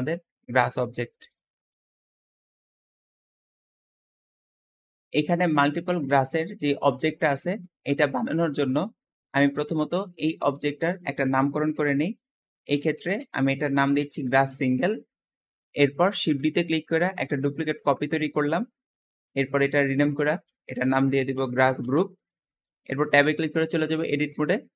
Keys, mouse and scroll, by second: 4.6-7.3 shift+middle drag, 5.0 `, 5.2 click, 6.5-6.9 drag, 7.2 Escape, 7.3 scroll down 5, 7.7 shift+middle click, 8.4 scroll up 1, 8.6 shift+middle click, 9.2 click, 9.4 g, 10.6 click, 10.8-13.2 drag, 12.2-16.1 typing, 15.6-16.1 middle drag, 16.4 shift+drag, 17.1-17.7 shift+drag, 18.0-18.4 shift+middle drag, 18.4 scroll up 1, 19.2 shift+click, 19.4-20.6 shift+drag, 20.3-22.0 typing, 21.9 click, 23.1 Tab, 23.3 middle click, 24.2 a, 24.5-24.7 scroll up 2.